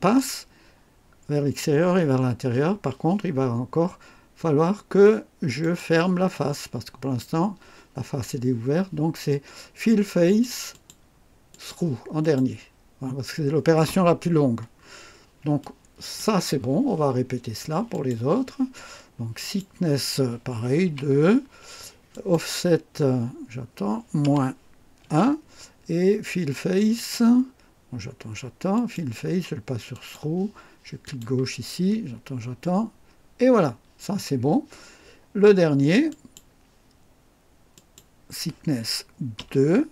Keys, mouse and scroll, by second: 5.6 click, 6.3 click, 10.2 click, 10.7 click, 11.5 click, 12.2 click, 14.8-15.1 scroll down 1, 15.6 click, 17.9 click, 19.4 click, 20.8 2, 22.1 click, 24.2 -, 25.0 1, 26.9 click, 28.7 click, 29.9 click, 31.0 click, 36.0 click, 37.7 click, 39.4 2.